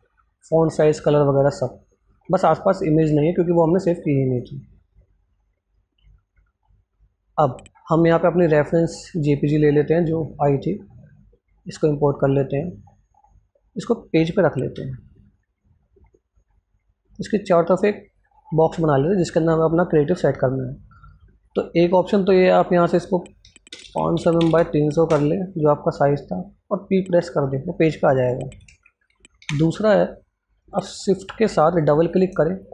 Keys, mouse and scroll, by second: 0.4 click, 1.5 scroll down 1, 4.2 click, 7.6 click, 7.7 alt+Tab, 9.1-14.1 drag, 14.6 p, 18.0 click, 26.5 click, 27.1 p, 28.6 ctrl+z, 29.3 Delete, 31.8 shift+click.